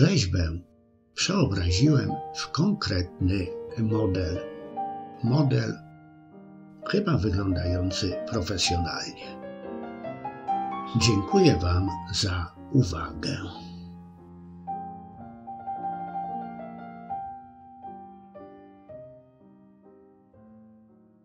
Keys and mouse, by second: 1.1 KP_5, 4.4 KP_6, 4.7 KP_6.